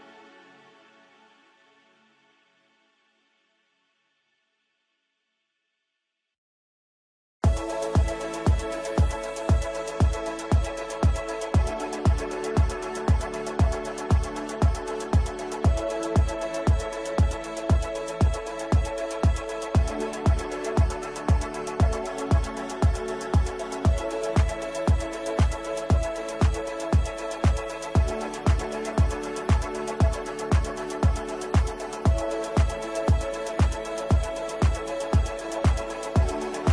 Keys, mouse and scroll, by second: 8.2 alt+click, 8.8 ctrl+g, 9.1 shift+click, 9.3 c, 10.0 click, 11.7 c, 12.4 click, 12.7 shift+F2, 13.3 click, 15.2-23.1 drag, 23.1 right click, 23.7 click, 24.0 F2, 24.1-26.8 drag, 27.0-30.2 ctrl+drag, 30.2 right click, 31.7 click, 35.0 right click, 36.1-36.7 drag.